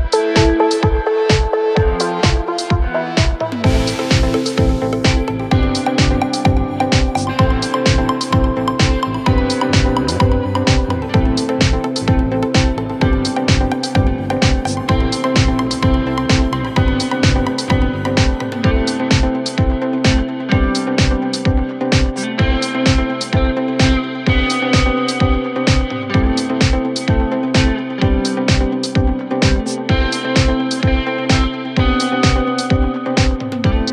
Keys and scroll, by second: 19.7 c, 20.0 F3, 21.9 c, 25.1 F3, 31.0 ctrl+g, 31.4 c, 32.3 Escape, 33.0 shift+F2.